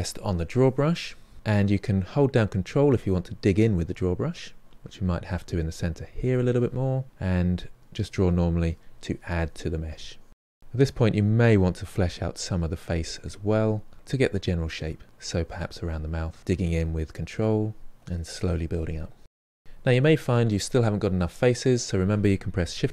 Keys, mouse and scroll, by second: 1.3 f, 2.0-4.0 ctrl+drag, 4.0 middle click, 4.6-5.8 ctrl+drag, 5.8 middle click, 6.6-10.0 drag, 10.0 middle click, 10.5-11.5 drag, 11.5 middle click, 11.7 shift+click, 12.0 middle click, 12.2 click, 12.9 middle click, 13.1 ctrl+click, 13.8 middle click, 14.1-15.2 shift+drag, 15.2 middle click, 15.6 shift+click, 15.9 middle click, 16.2 click, 16.4 middle click, 16.6 click, 16.9 middle click, 17.0 click, 17.8 ctrl+middle click, 18.5-20.5 drag, 20.5-22.7 ctrl+middle drag, 22.7 shift+r.